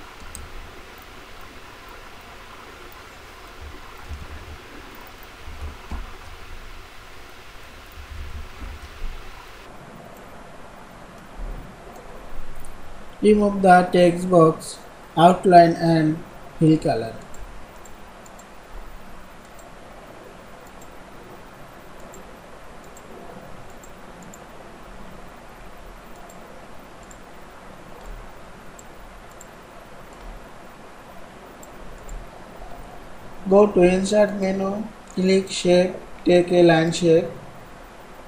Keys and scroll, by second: 5.8 ctrl+shift+,, 8.0 ctrl+a, 8.4 ctrl+shift+,.